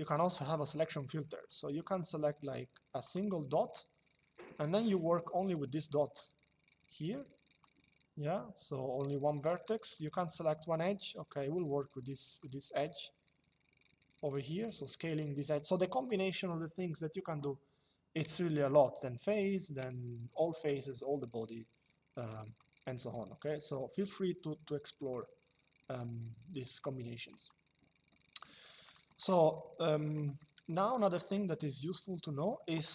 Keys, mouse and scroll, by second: 1.1 click, 2.7 click, 9.6 click, 12.1 click, 22.3 click, 27.1 click, 28.5 click, 29.3 Escape, 30.0 middle click, 30.3 shift+middle click.